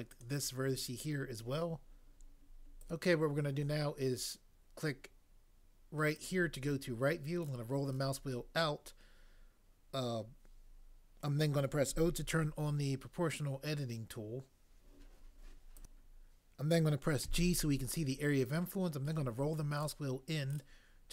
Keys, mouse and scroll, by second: 0.2 shift+click, 11.8 o, 17.2 g.